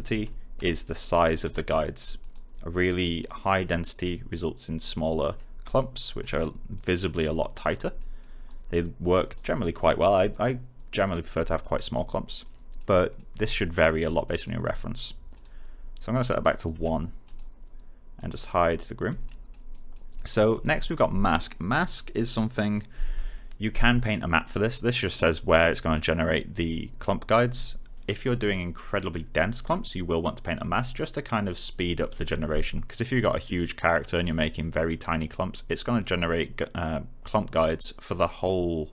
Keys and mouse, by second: 0.5-1.4 typing, 2.1 click, 5.7 right click, 6.1 click, 6.8 right click, 7.2 click, 7.9 alt+middle click, 8.4 click, 11.5 alt+middle click, 12.2 alt+right click, 12.7 alt+middle click, 14.2 alt+click, 16.7 1, 17.2 click, 19.2 alt+middle click, 19.6 alt+right click, 20.1 alt+middle click.